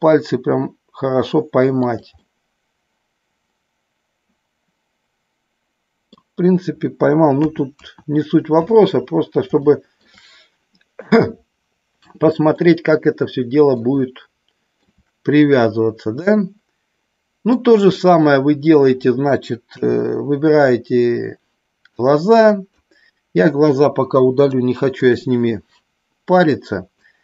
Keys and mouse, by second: 1.8 click, 2.2-6.0 middle drag, 7.4 KP_2, 7.8 KP_1, 9.7 shift+middle click, 12.5-13.7 shift+middle drag, 14.1-14.8 shift+middle drag, 16.2-17.4 middle drag, 17.9-18.7 middle drag, 19.7 KP_3, 21.9-22.8 drag, 24.2 Delete, 27.1-27.2 drag.